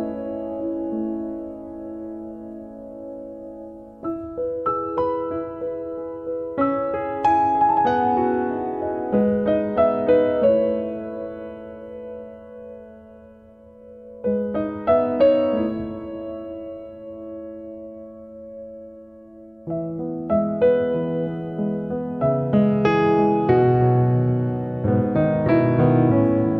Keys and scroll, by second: 1.5 l, 5.4 space, 18.7 1, 20.9 0, 21.0 Return.